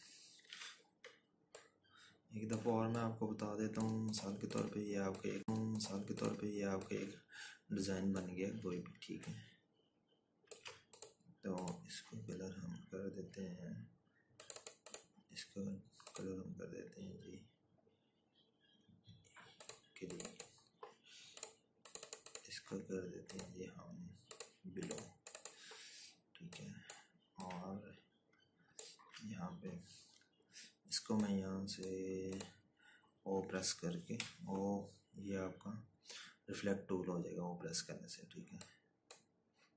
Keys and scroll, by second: 3.2 ctrl+g, 35.3 o.